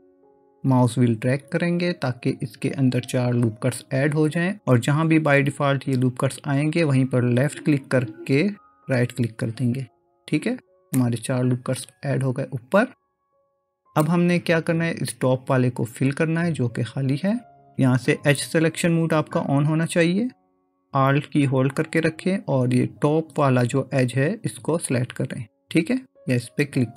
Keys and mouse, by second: 11.0-14.0 middle drag, 24.9 alt+click.